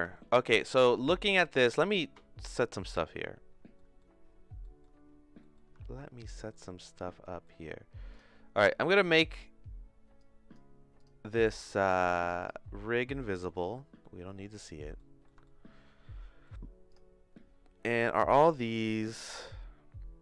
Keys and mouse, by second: 0.1 shift+middle click, 3.8 middle click, 4.7 middle click, 5.4 middle click, 5.8 shift+middle click, 6.5 middle click, 7.2 middle click, 7.3 click, 8.1 click, 10.2 click, 10.9 click, 11.7 click, 12.2 click, 12.4 click, 13.3 middle click, 14.0 shift+middle click, 15.0 middle click, 15.4-16.4 shift+middle drag, 19.3 click.